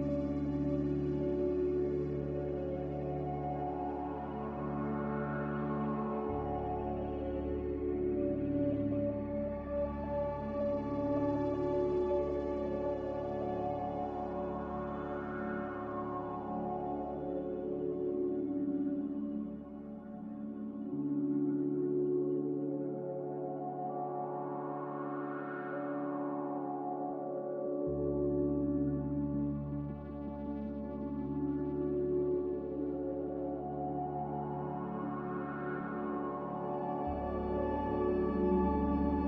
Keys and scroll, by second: 1.2 z, 6.3-7.1 typing, 10.1 x, 22.9 z.